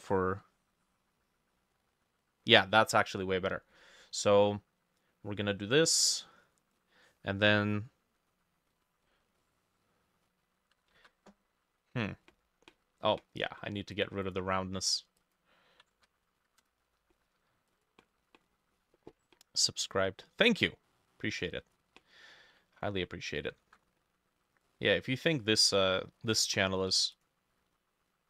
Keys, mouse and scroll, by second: 6.8-8.8 drag, 10.8-13.0 ctrl+shift+drag, 10.8 ctrl+shift+middle click, 11.3 ctrl+shift+a, 14.3 double click, 16.0 ctrl+a, 16.4 0, 16.6 Return, 22.6 ctrl+middle click, 23.0 Return, 23.6 ctrl+shift+middle click, 23.7 ctrl+shift+a, 26.8 f.